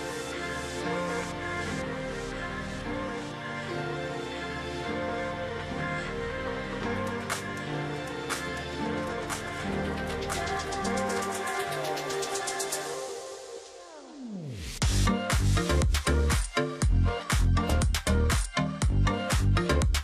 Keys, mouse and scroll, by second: 0.0 ctrl+click, 2.9-3.2 alt+scroll down 1, 3.2-3.7 alt+scroll up 1, 3.9 space, 6.5 ctrl+click, 7.2 ctrl+click, 8.8-9.5 alt+scroll down 1, 9.5-10.1 alt+scroll up 1, 10.1-10.5 alt+scroll down 1, 11.1-11.7 alt+scroll up 1, 12.9 double click, 14.6 alt+scroll up 1, 15.0 space, 16.4 ctrl+z, 18.3 space.